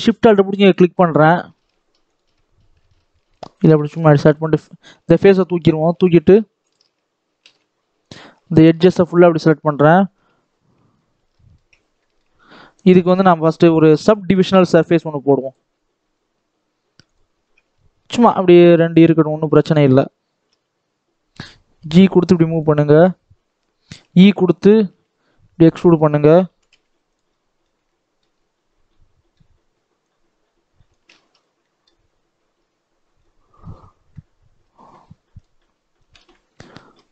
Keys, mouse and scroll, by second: 0.2 alt+shift+click, 1.3 ctrl+z, 1.9 alt+shift+click, 2.7 ctrl+z, 3.2 shift+click, 3.8 x, 4.8 alt+a, 5.7 click, 5.8 alt+a, 6.5 alt+shift+click, 7.3 alt+a, 8.0-9.0 drag, 10.1 KP_7, 10.3-11.3 scroll down 8, 11.3 shift+middle click, 11.6-11.9 scroll up 1, 11.9 shift+middle click, 12.3 Tab, 13.1 Tab, 15.6 click, 16.0-16.4 scroll down 2, 16.4-17.0 scroll up 1, 17.0 click, 17.3 scroll up 2, 17.5 Tab, 18.8 click, 19.1 scroll down 1, 19.4 shift+middle click, 19.7 scroll down 3, 20.3 g, 22.8 shift+middle click, 23.1-23.8 scroll up 2, 23.8 e, 25.6 shift+middle click, 26.0-26.4 scroll down 2, 26.4 g, 27.2-28.3 middle drag, 28.3-28.8 scroll up 2, 28.8-29.9 middle drag, 29.9-31.0 drag, 31.0 ctrl+z, 31.3 scroll up 2, 31.5-33.1 shift+middle drag, 33.1-35.3 scroll down 1, 35.3 click, 35.5-36.1 scroll up 1, 36.1 alt+a, 36.5 scroll down 3, 36.7 middle click, 37.0-37.1 scroll up 2.